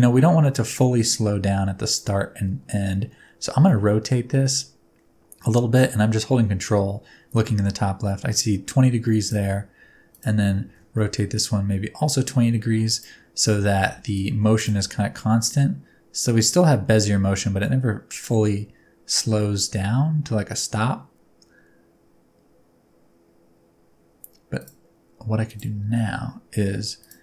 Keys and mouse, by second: 1.8 click, 3.6 r, 9.2 ctrl+click, 10.1 click, 10.6 r, 12.9 ctrl+click, 13.9 alt+a, 14.6 click, 14.8 space, 24.6 click, 25.5 click, 25.9 s.